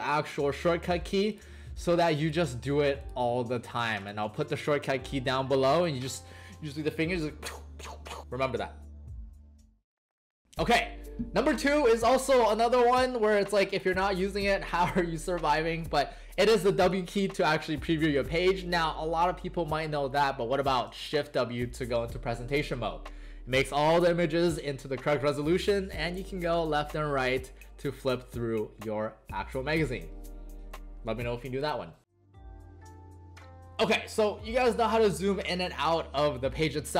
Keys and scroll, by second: 1.6 ctrl+alt+shift+c, 2.7 ctrl+alt+shift+e, 3.4 ctrl+alt+shift+e, 4.2 ctrl+alt+shift+c, 17.2 w, 21.0 shift+w, 25.7 Right, 26.3 Right, 26.7 Left, 27.1 Right, 28.1 Right, 28.1 Left, 28.7 Right.